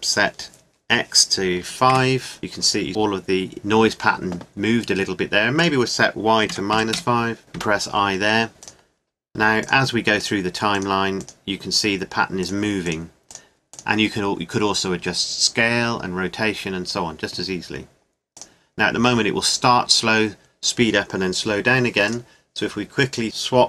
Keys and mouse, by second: 5.6-7.4 drag, 7.6 i, 8.8-10.9 drag, 14.1-15.6 drag, 15.6-18.3 middle drag, 18.3-20.2 drag, 22.2-23.4 drag.